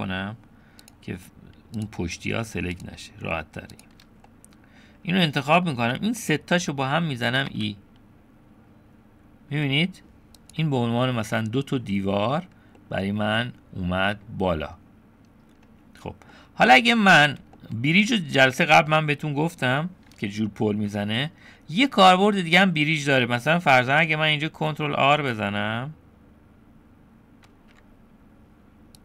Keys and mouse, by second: 0.8 click, 1.8 click, 2.7 shift+click, 4.3 middle click, 7.5 e, 12.8-14.3 middle drag, 16.3 middle click, 17.6 shift+middle click, 19.0 middle click, 22.3 middle click, 27.6 ctrl+r.